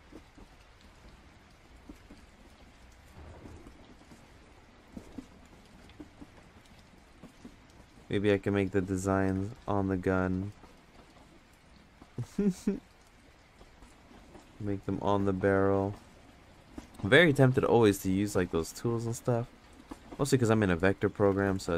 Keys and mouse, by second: 2.1 ctrl+z, 2.3-3.3 drag, 4.1 ctrl+z, 4.3-5.6 drag, 6.4 ctrl+z, 6.9-8.1 shift+drag, 9.2 ctrl+z, 9.9-11.1 shift+drag, 12.3 ctrl+z, 12.9 shift+click, 14.6 ctrl+z, 16.4 ctrl+z, 18.4 shift+click, 19.6 ctrl+z, 19.9 shift+click, 21.3 ctrl+z.